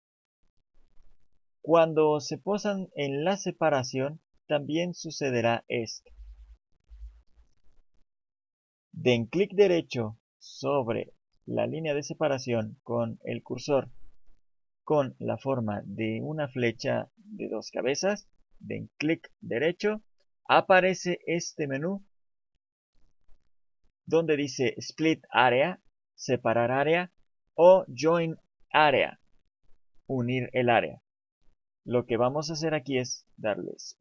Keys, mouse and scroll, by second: 7.3 click.